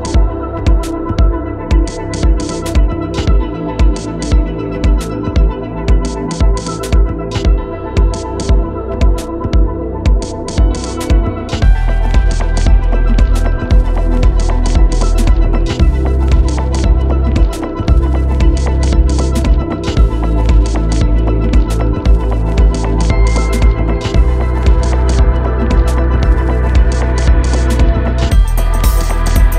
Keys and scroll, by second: 6.3 Escape, 9.1 Escape, 17.9 Escape, 23.0 Escape.